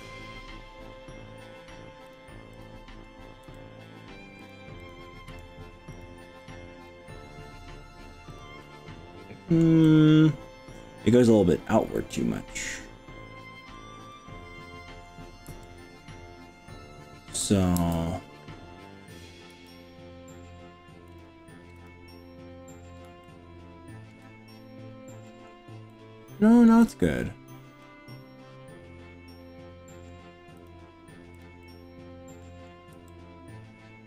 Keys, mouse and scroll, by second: 0.2-0.8 scroll up 3, 2.6 click, 3.4 g, 4.4 click, 4.8 click, 5.3 g, 6.0 click, 6.3-6.8 scroll down 3, 6.9 middle click, 8.4 click, 8.6-9.6 middle drag, 9.8-13.8 middle drag, 14.1-15.1 middle drag, 15.5 f, 17.4 KP_7, 17.8 f, 19.5 g, 21.2 click, 21.8 drag, 22.2-22.6 scroll up 3, 23.2-24.2 shift+middle drag, 25.3 middle click, 25.9-26.8 middle drag, 26.8 click, 27.8-30.2 middle drag, 30.6 click, 31.4 drag, 31.6-32.7 middle drag, 33.0 g.